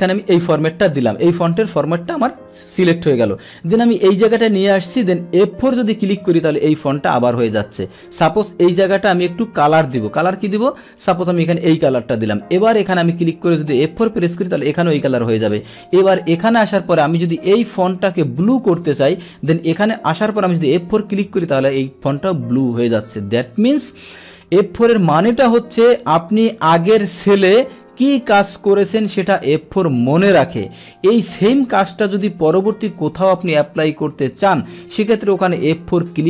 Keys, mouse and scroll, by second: 0.3 click, 4.1 click, 5.5 F4, 8.0 click, 9.7 click, 11.6 click, 12.8 click, 13.8 F4, 15.7 click, 17.2 click, 18.4 click, 19.4 click, 20.7 F4, 26.2 click, 32.4 click.